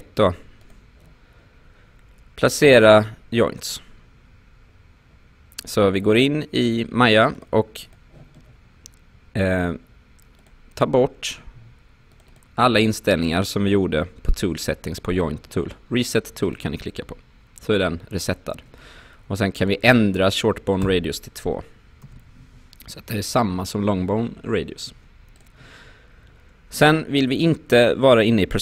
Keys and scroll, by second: 20.8 2, 22.0 Return.